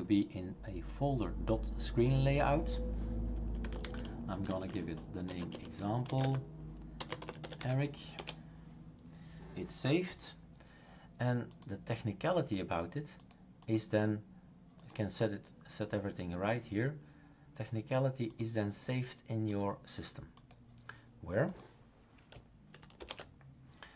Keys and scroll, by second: 3.4-8.1 typing, 8.2 Return, 23.0 shift+super+Return.